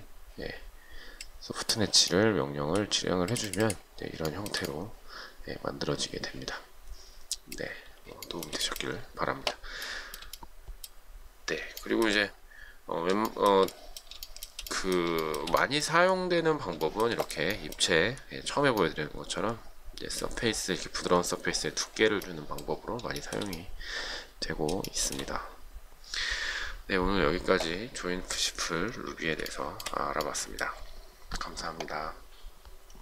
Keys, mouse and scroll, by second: 4.6 shift+middle click, 8.5 shift+middle click, 10.1 shift+middle click, 12.1 shift+middle click, 13.5 shift+middle click, 14.5 shift+middle click, 15.4 shift+middle click, 17.3 shift+middle click, 23.4 shift+middle click, 29.8 shift+middle click.